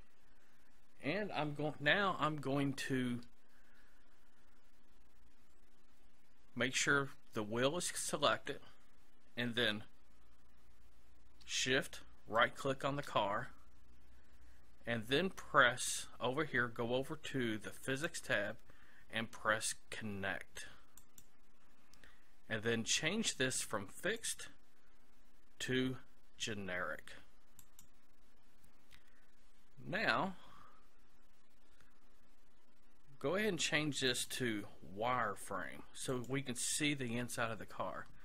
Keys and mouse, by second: 12.4-14.0 right drag, 14.1 right click, 17.9-19.7 drag, 21.0-22.8 drag, 24.2-25.8 drag, 34.1-35.8 drag.